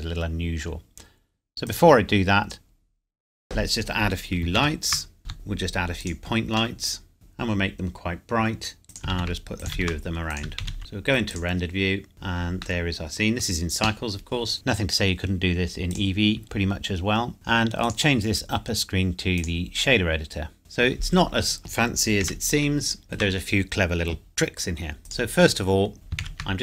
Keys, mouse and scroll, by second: 2.3 scroll down 1, 4.6 shift+a, 5.2 click, 5.3 g, 6.1 click, 6.4-6.8 scroll up 1, 6.8 middle click, 7.1 KP_Enter, 8.8 shift+d, 8.9 click, 9.1 shift+d, 9.6 click, 9.8 shift+d, 10.3 click, 10.6 shift+d, 11.3 click, 12.1 scroll down 1, 12.9 middle click, 13.4 scroll up 1, 14.5 click, 15.9 click, 16.4 scroll up 1, 16.7 middle click, 17.3 scroll down 1, 18.0 click, 20.1-20.6 scroll up 1, 20.6-21.0 scroll down 1, 22.3 n, 23.0 shift+middle click, 25.1 click, 25.7 scroll up 1, 25.9 click, 26.2 shift+a.